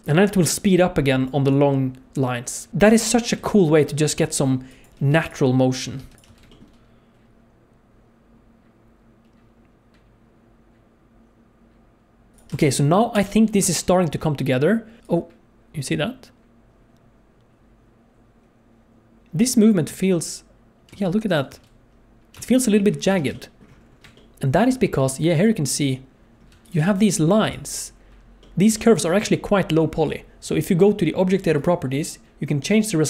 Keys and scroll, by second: 0.0-3.3 typing, 5.1 x, 6.0 ctrl+z, 6.1 g, 6.2 space, 12.3 space, 12.5 space, 13.1 KP_0, 13.6 space, 19.9 space, 21.2 space, 21.5 space, 22.5 space, 23.2 alt+shift+z, 26.8 h.